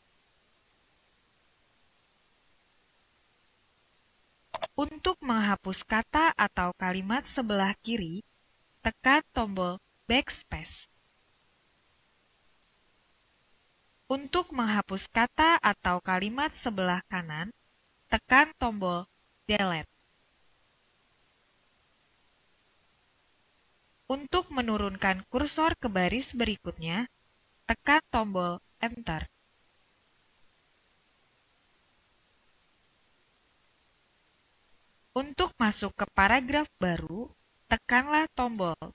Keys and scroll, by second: 10.2 BackSpace, 19.6 Delete, 31.5 Return.